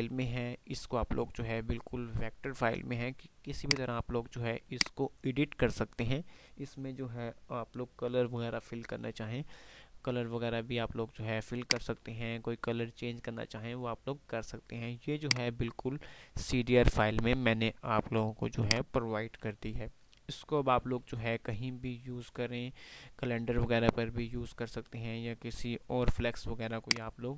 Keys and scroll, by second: 0.5 F3, 1.1 F3, 4.0 F3, 19.8 F2, 22.1 F2, 22.6 F2.